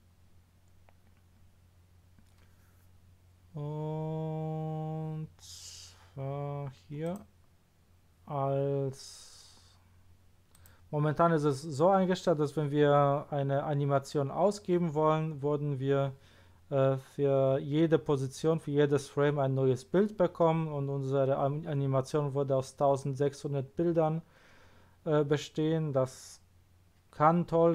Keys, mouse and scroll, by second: 0.3-1.2 scroll down 1, 5.3 scroll up 2, 5.9 scroll down 2, 6.4 scroll down 2, 7.0 click, 10.5 click.